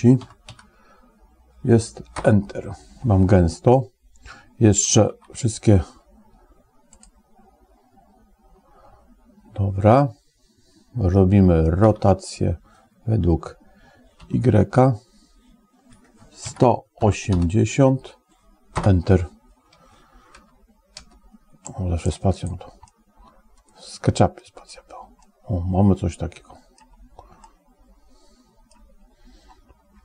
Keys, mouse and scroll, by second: 0.3 0, 4.9 ctrl+a, 12.0 r, 20.2 space, 20.9 space, 21.5 middle click, 22.7-24.3 middle drag, 25.1-26.7 middle drag, 27.3-28.6 middle drag.